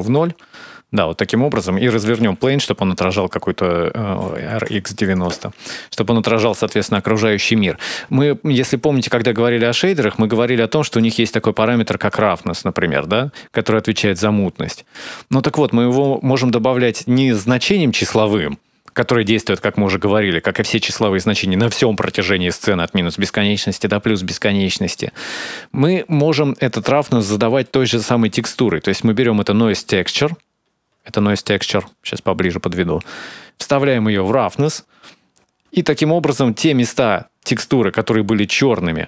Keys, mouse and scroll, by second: 2.1 r, 5.2-6.2 scroll down 4, 5.5 middle click, 6.3-7.0 scroll up 4, 7.0 middle click, 8.0 scroll up 2, 8.5 shift+middle click, 10.1 click, 11.9 click, 15.7 click, 17.0 middle click, 22.6-23.4 scroll down 5, 23.4 middle click, 24.2-24.7 scroll down 4, 24.7 middle click, 27.1 middle click, 28.0 click, 28.2 shift+d, 30.0-31.4 scroll up 14, 31.4 scroll down 1, 31.6 middle click, 31.6-32.5 scroll down 2, 33.5 click, 36.0 middle click, 37.7 scroll up 1, 38.2 middle click.